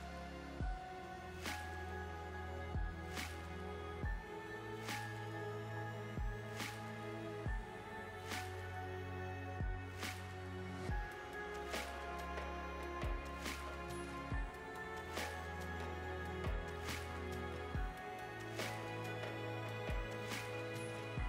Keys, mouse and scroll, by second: 7.6 space, 8.2 click, 10.4 ctrl+s, 10.8 middle click, 11.8-12.3 scroll up 6, 12.3 click, 12.7 middle click, 14.4 Tab, 14.8 middle click, 16.5 scroll up 2, 17.5 l, 17.8 l, 19.0 l, 19.3 l, 19.8 l, 20.0 l, 20.8 middle click.